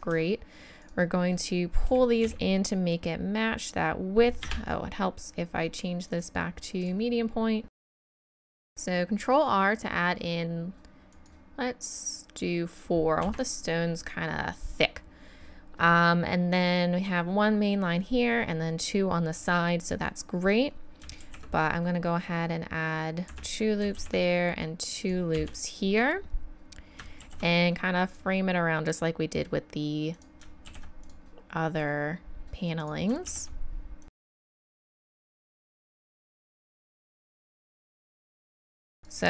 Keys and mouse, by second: 1.9 s, 6.1-6.9 drag, 7.7 s, 8.3 click, 8.6 ctrl+r, 21.3 ctrl+r, 24.0 ctrl+r, 27.2 ctrl+r, 31.1 ctrl+r, 33.3 ctrl+r, 34.5 ctrl+r, 34.8 ctrl+r, 35.0 ctrl+z, 35.1 ctrl+r, 35.4 ctrl+r, 35.7 ctrl+r, 35.9 ctrl+r, 36.2 ctrl+r, 36.5 ctrl+r, 36.8 ctrl+r, 37.0 ctrl+r, 37.3 ctrl+r, 37.6 ctrl+r, 38.5 ctrl+r, 39.0-39.2 right drag.